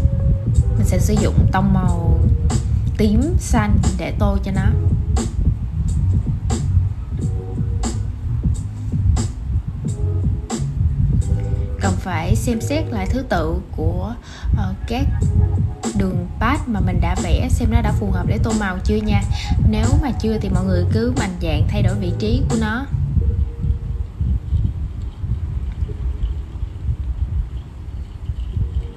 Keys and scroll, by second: 5.4 super+{, 17.3 super+z.